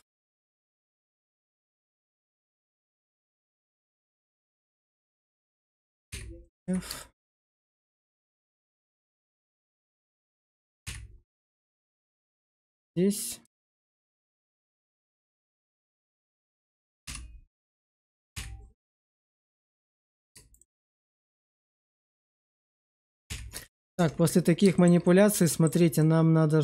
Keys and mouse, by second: 0.6 shift+middle click, 1.5 click, 2.3 click, 2.8 shift+click, 3.6-5.1 shift+drag, 6.0 f, 6.4 alt+z, 6.9 shift+middle click, 7.3 middle click, 10.8 f, 11.3 shift+middle click, 11.7 middle click, 12.3 shift+middle click, 14.5 shift+middle click, 15.5 middle click, 17.0 2, 18.3 f, 18.6 middle click, 20.1 click, 22.3 shift+click, 23.2 f, 23.5 shift+middle click, 23.8 Tab, 24.6 shift+middle click, 24.9 middle click, 25.9 middle click.